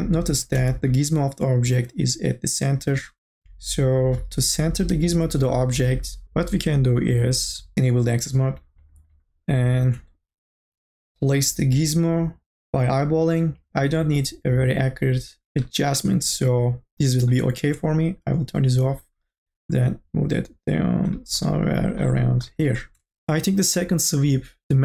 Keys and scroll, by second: 0.5 ctrl+z.